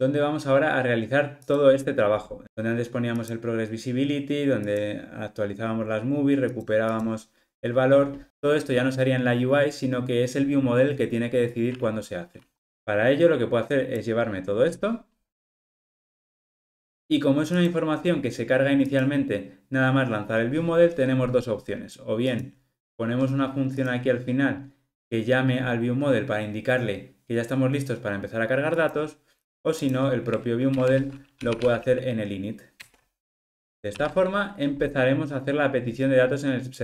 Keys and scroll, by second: 15.6 super+x, 32.8 Return.